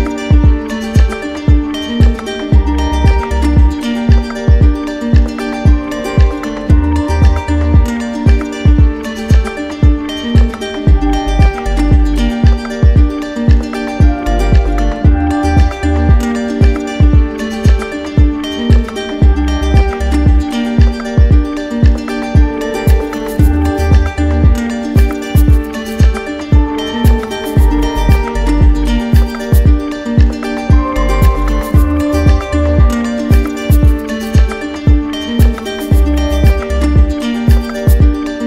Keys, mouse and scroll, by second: 1.4 click, 1.8 w, 5.4-6.5 drag, 7.6 right click, 8.1-9.4 drag, 10.4-11.4 right drag, 13.6-14.7 drag, 16.0-17.1 drag, 17.5-19.5 drag, 20.5 right click, 23.5 click, 25.6 click, 26.4 right click, 27.0 middle click, 27.7 right click, 28.2 right click, 28.2 alt+click, 30.5 click, 31.4 click, 33.6 right click, 34.6 click, 34.7 click, 36.6 right click, 37.1 alt+right click.